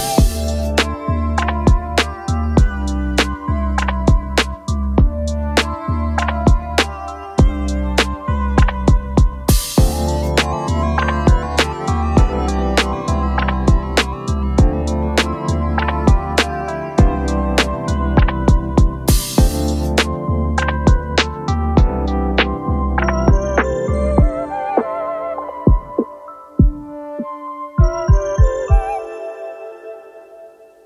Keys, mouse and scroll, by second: 13.3-21.5 space, 22.5 alt+scroll up 1, 29.1 End.